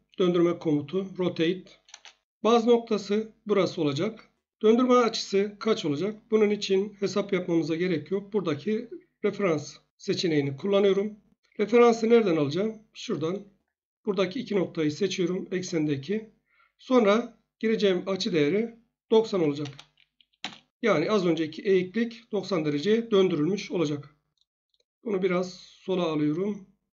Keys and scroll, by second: 1.9 Return, 19.3 typing, 20.4 Return.